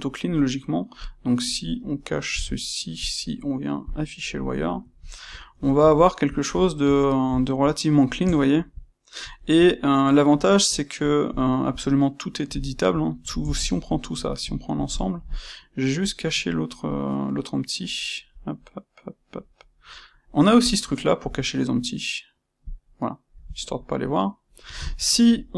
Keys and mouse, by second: 2.3 n, 2.9-4.7 drag, 4.7-20.5 shift+middle drag, 20.5-23.8 drag, 23.8-25.5 middle drag.